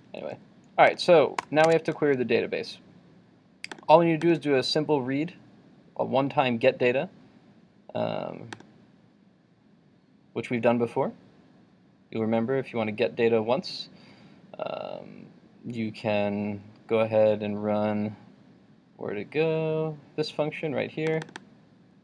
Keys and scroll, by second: 1.8 super+Tab.